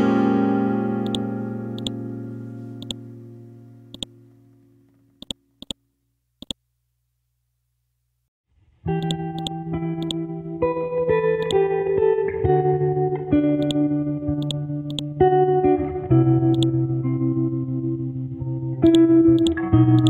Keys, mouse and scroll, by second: 4.0 click, 11.5 right click, 13.6 click, 15.8 ctrl+z, 18.9 click.